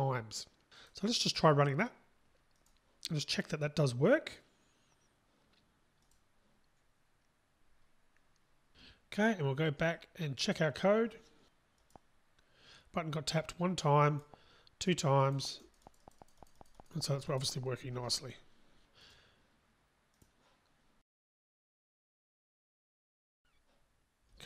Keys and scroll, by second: 2.8 ctrl+shift+r, 6.4 ctrl+shift+r, 20.4 ctrl+shift+r.